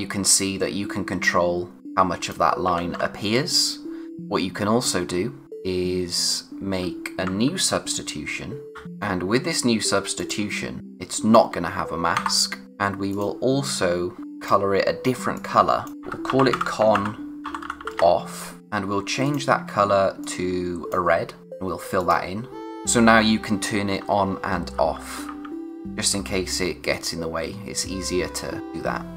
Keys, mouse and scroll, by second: 2.8 ctrl+z, 6.2 click, 8.7 alt+shift+d, 8.9 click, 14.2-15.6 scroll down 1, 15.7-18.3 typing, 18.6 click, 22.9-23.4 scroll up 1, 25.8 [.